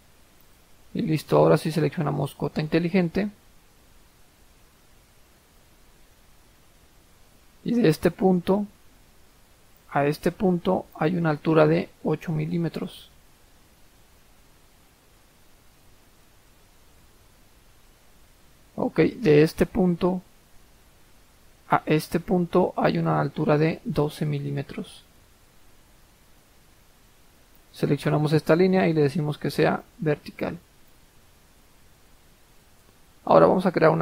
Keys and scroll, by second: 12.6 8, 13.0 Return, 23.4-24.3 typing, 25.0 Return, 26.4 Escape.